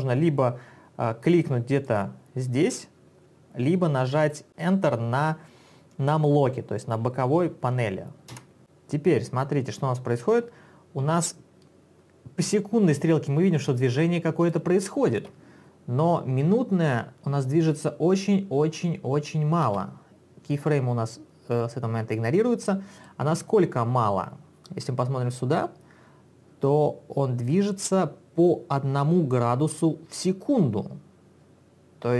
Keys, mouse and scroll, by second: 2.0 click, 2.8 click, 8.4 Return, 8.8 click, 15.2 space, 19.7 space, 23.1 click, 27.5 click.